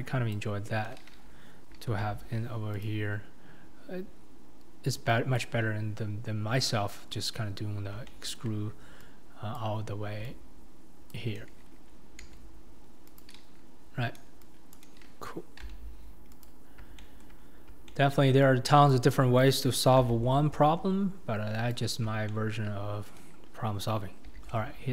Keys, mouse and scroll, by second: 0.3 click, 2.0 g, 5.4 click, 8.1-9.6 shift+middle drag, 9.6 click, 12.2 s, 14.7 click, 15.7 g, 17.0 shift+middle click, 17.9-18.9 shift+middle drag, 18.9 click, 20.0 g, 22.3 shift+middle click, 24.3 e.